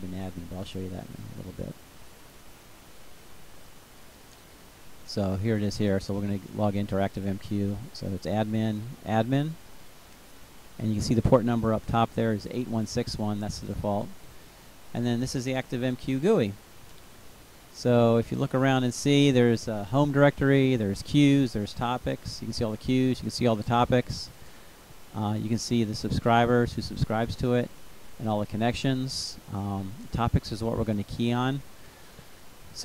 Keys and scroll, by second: 2.2 ctrl+v, 3.5 Return, 5.6-9.5 typing.